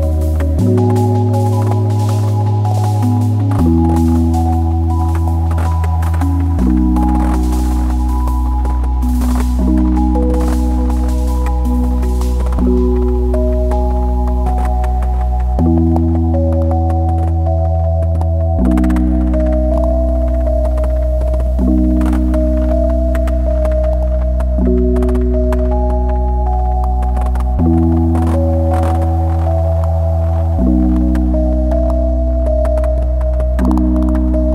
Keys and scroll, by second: 10.6 `, 15.6 /, 17.9 /, 25.7 `.